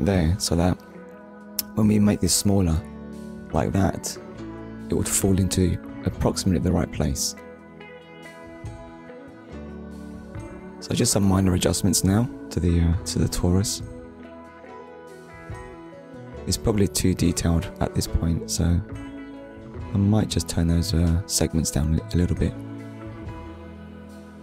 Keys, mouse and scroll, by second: 3.4 shift+middle click, 4.2 scroll up 1, 5.0 shift+middle click, 6.4 click, 9.0 shift+click, 12.4 shift+click.